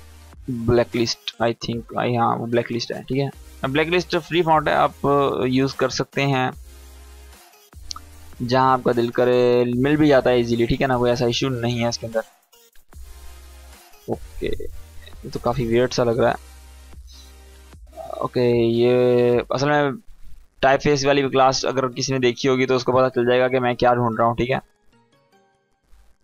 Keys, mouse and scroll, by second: 2.2 BackSpace, 3.5-6.2 typing, 7.5-13.0 drag, 14.8 ctrl+z, 17.0 click, 21.7 click, 24.6-25.5 scroll down 1, 25.5 click.